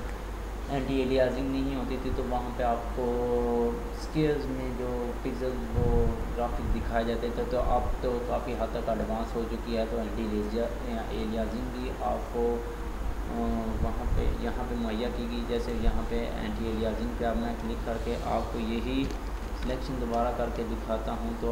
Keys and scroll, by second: 19.6 ctrl+d.